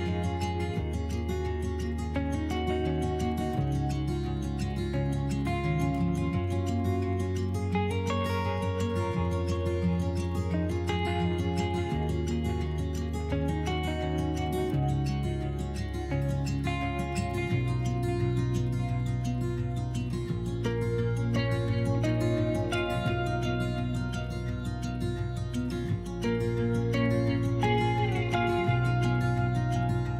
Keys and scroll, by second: 2.0 s, 7.9 s, 10.9 s, 17.0 s, 21.4 s, 24.2 s, 25.3 s, 29.6 s.